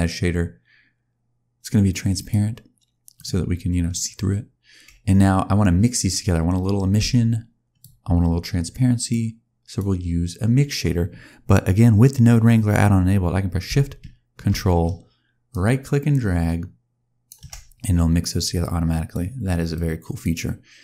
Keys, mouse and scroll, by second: 6.8 click, 9.0 click, 15.4 ctrl+shift+right click, 18.5 click, 19.6 click, 20.7 click.